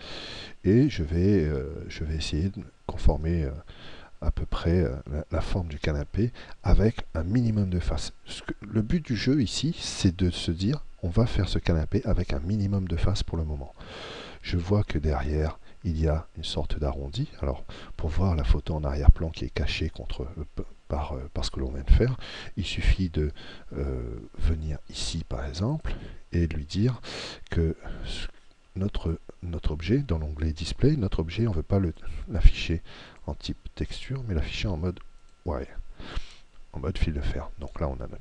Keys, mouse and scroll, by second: 25.7-30.9 drag, 31.9-35.0 drag.